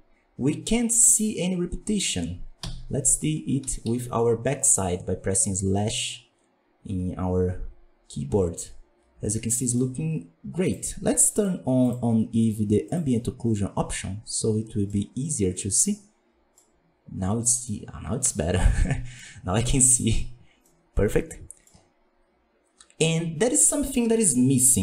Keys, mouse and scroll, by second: 1.9-2.5 scroll down 3, 2.5 KP_Divide, 3.0-3.5 scroll down 1, 3.5 KP_1, 3.8 KP_5, 4.2-4.6 scroll up 3, 4.6-7.6 middle drag, 11.9-13.0 drag, 13.7 scroll down 1, 13.9-15.0 middle drag, 15.0 scroll up 2, 15.5-17.3 middle drag, 17.3 scroll down 3, 17.6-19.3 middle drag, 19.3-20.6 scroll up 3, 19.6-19.9 middle drag, 20.6-21.6 middle drag, 21.6-24.0 scroll down 4.